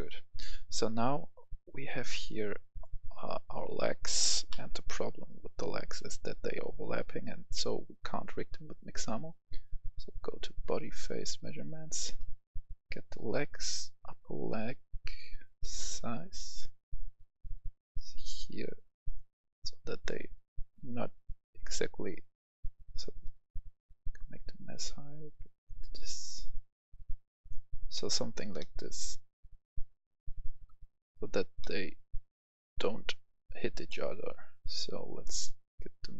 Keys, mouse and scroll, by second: 1.0-2.8 scroll up 1, 2.8 ctrl+v, 4.5 ctrl+z, 5.4-8.9 scroll down 1, 9.8 click, 12.2-13.9 scroll down 1, 15.4-27.9 drag, 27.9-31.0 middle drag, 31.0 scroll down 1, 31.6 middle click, 32.7-33.3 scroll up 1, 33.8 middle click, 35.2-36.1 drag.